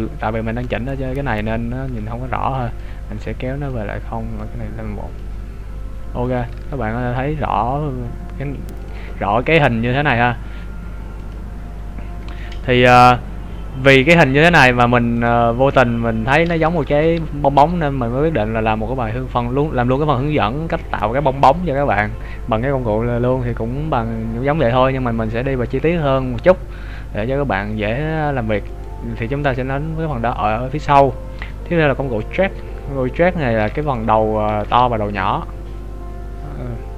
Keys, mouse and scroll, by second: 3.0 click, 6.3 right click, 6.5 Tab, 9.7 click, 17.0 g, 28.8 right click, 32.3 click, 33.9 right click, 34.5 g.